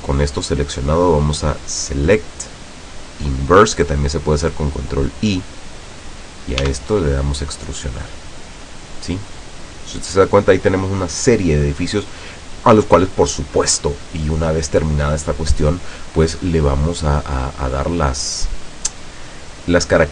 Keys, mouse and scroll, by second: 1.4 click, 4.9 click, 6.7 e.